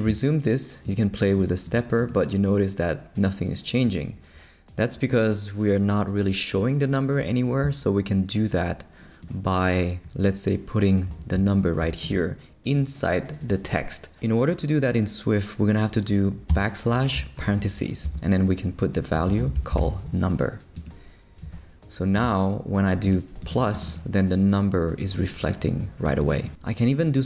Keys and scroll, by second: 11.1 Left, 11.3 Right, 11.8 space, 12.0 Left, 16.5-17.9 typing, 18.0 shift+Left, 18.6 Left, 19.1-20.3 typing.